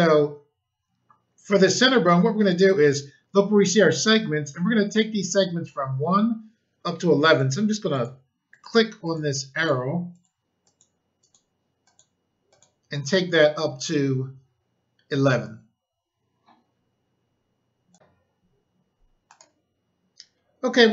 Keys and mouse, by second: 7.3 click, 7.9 click, 8.5 click, 9.0 click, 9.5 click, 9.6 double click, 10.1 click, 10.6 click, 10.7 click, 11.2 click, 11.8 click, 12.4 click, 17.9 click, 18.7 click, 19.2 click.